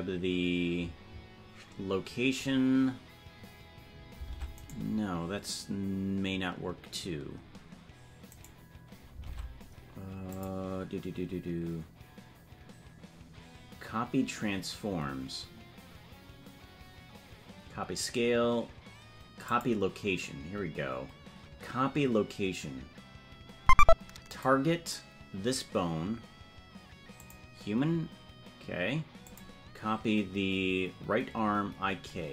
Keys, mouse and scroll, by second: 4.4 ctrl+Tab, 4.7 right click, 10.3-20.2 drag, 24.2 click, 29.2-32.3 drag.